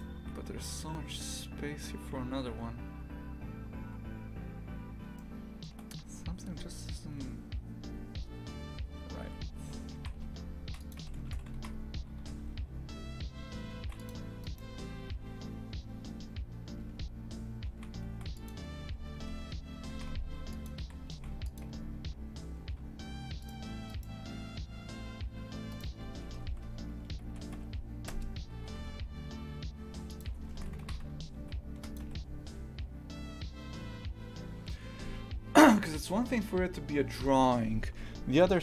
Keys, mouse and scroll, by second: 3.7-4.3 scroll up 2, 5.2-10.0 shift+middle drag, 10.0 shift+f, 11.0 a, 11.6 shift+f, 14.5-16.7 right drag, 16.7 Tab, 17.8 shift+f, 18.9-21.7 typing, 23.4 alt+shift+right click, 23.9-25.8 alt+shift+right drag, 26.3 s, 30.3 Tab, 30.8 shift+f, 32.1 a.